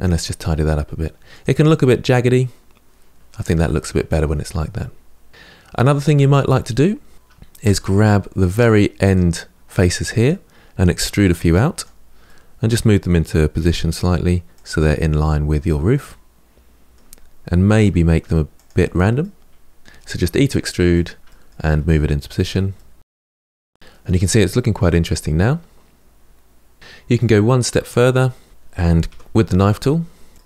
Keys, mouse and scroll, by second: 1.4-4.0 middle drag, 4.0 Tab, 4.3-5.8 middle drag, 5.8 Tab, 6.2-7.4 middle drag, 7.4 3, 8.1 middle click, 8.8 click, 9.4-10.8 middle drag, 10.8 e, 12.0-13.3 middle drag, 13.3 g, 15.8-17.4 middle drag, 17.4 r, 19.0-20.0 middle drag, 20.0 click, 20.1 middle click, 20.8 e, 21.2 middle click, 21.3 g, 21.7 middle click, 22.4 r, 23.0 shift+middle click, 23.3 Tab, 23.5 scroll down 4, 23.7-27.3 middle drag, 27.3-28.2 scroll up 4, 28.2 Tab, 28.5 middle click, 28.8 k.